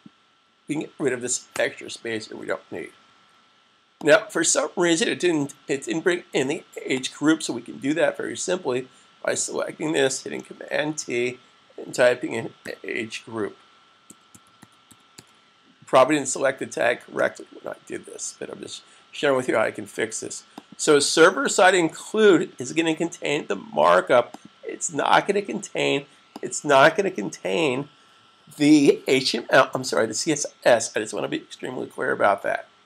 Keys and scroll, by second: 3.1 super+s, 10.4 super+t, 13.2-15.5 typing, 21.6 s.